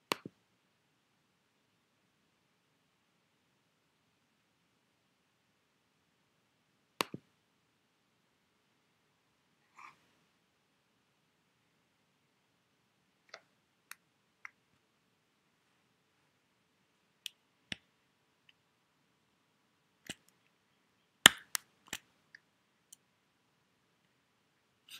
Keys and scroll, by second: 17.7 Escape, 21.3 Escape.